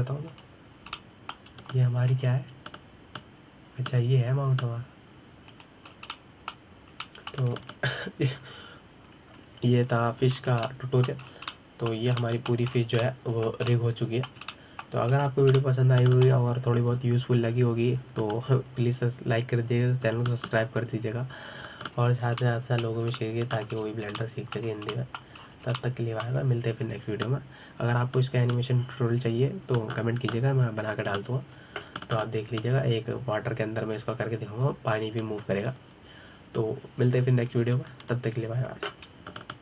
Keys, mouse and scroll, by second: 0.0-1.4 shift+middle drag, 1.4 alt+z, 2.1 click, 2.8-4.0 middle drag, 4.0 g, 7.7 scroll down 2, 7.9-11.9 middle drag, 12.1 ctrl+Tab, 12.5-13.1 middle drag, 13.1 scroll down 3, 13.3-14.5 middle drag, 14.5 scroll up 2, 14.8-20.5 middle drag, 23.9-24.2 scroll down 2, 24.2-25.6 middle drag, 25.6-26.0 scroll up 3, 26.0-27.3 shift+middle drag, 27.3 scroll down 2, 27.6-30.7 shift+middle drag.